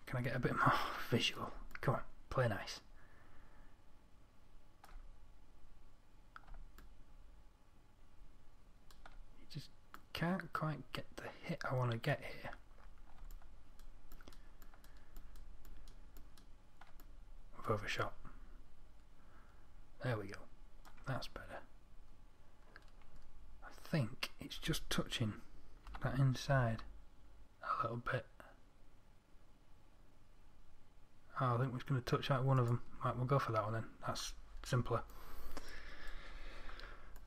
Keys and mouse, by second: 0.2-2.1 middle drag, 2.3 middle click, 14.7 middle click, 15.3 middle click, 15.8 middle click, 16.3-17.4 middle drag, 19.7 middle click, 22.1-24.0 middle drag, 24.2-26.3 middle drag, 26.3 g, 33.5-35.4 middle drag.